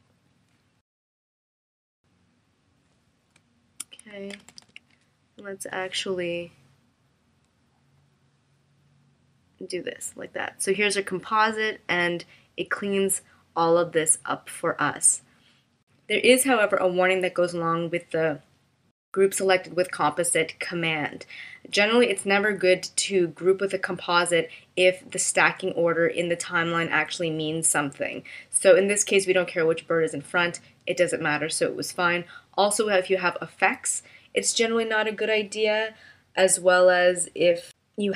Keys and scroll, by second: 3.4 space, 4.3 super+-.